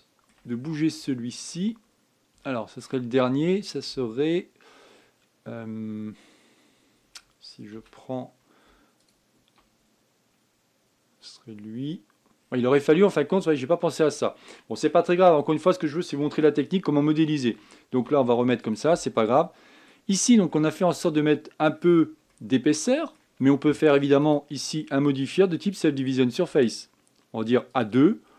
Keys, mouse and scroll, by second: 0.3-0.7 scroll up 6, 0.7 shift+middle click, 1.4-1.8 scroll up 4, 1.8 shift+middle click, 3.2-6.2 shift+middle drag, 8.5 a, 9.8 alt+click, 13.1-13.9 scroll down 9, 13.9-16.1 middle drag, 16.1-17.1 scroll down 4, 17.1-18.7 shift+middle drag, 18.7 z, 19.9 middle click, 20.9-21.3 scroll up 3, 21.3-25.0 middle drag, 25.0-28.0 drag.